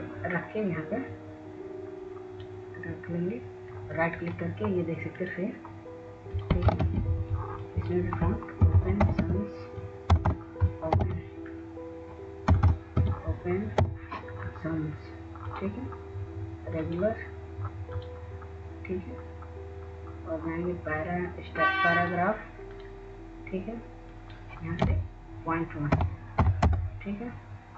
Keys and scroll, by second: 10.4 ctrl+a, 12.0-14.6 typing, 16.1 BackSpace, 16.3 BackSpace, 16.6 BackSpace, 17.5 BackSpace.